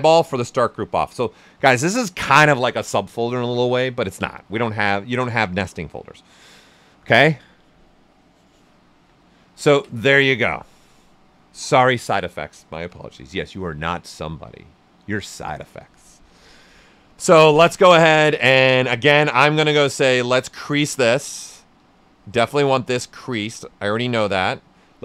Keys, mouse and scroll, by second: 8.4 click, 8.6-16.5 alt+right drag, 16.5-18.8 right drag, 18.8-24.2 drag.